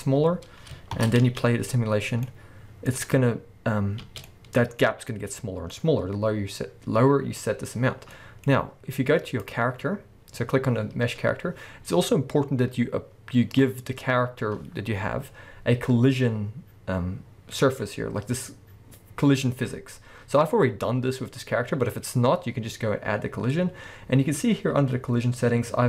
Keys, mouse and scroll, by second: 0.2-1.0 scroll down 2, 1.0 shift+Left, 1.2 space, 2.5-9.4 middle drag, 4.0 space, 4.9-5.4 scroll up 2, 7.9 scroll down 2, 8.5-9.4 scroll up 2, 9.4 click, 9.5-10.5 middle drag, 10.5-14.3 scroll down 1, 24.6-24.9 scroll down 1.